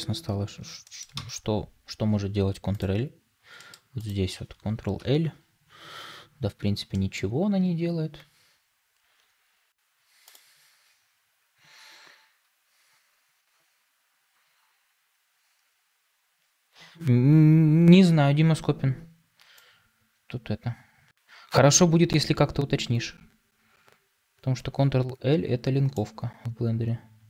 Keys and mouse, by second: 0.7 middle click, 1.0 ctrl+space.